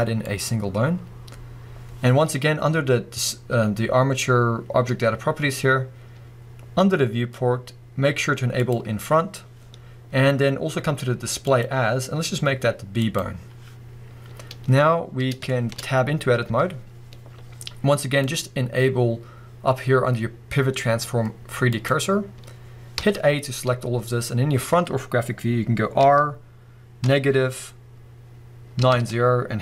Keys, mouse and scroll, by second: 8.6 click, 11.5-15.5 drag, 14.1-15.5 scroll up 1, 15.5-18.2 shift+middle drag, 16.5 Tab, 18.2-29.6 drag, 23.0 a, 23.9-26.0 scroll up 2, 26.0 r.